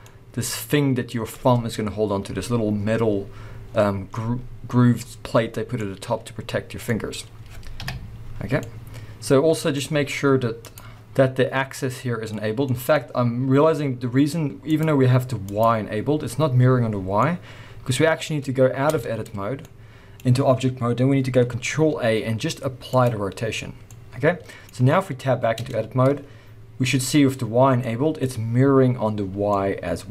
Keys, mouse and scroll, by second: 3.6 scroll down 1, 5.7 scroll up 1, 5.8 middle click, 6.7-10.6 middle drag, 7.7 KP_3, 10.6 click, 11.1 scroll up 2, 11.8-14.7 middle drag, 14.7 click, 15.5 click, 16.9 scroll down 2, 17.2-18.8 middle drag, 18.0 scroll down 1, 18.8 Tab, 19.4 scroll down 1, 19.6 middle click, 21.6 ctrl+a, 23.8 middle click, 24.9-30.1 middle drag, 24.9-25.3 scroll up 1, 25.6 Tab, 25.9 scroll up 1, 29.3 scroll down 1.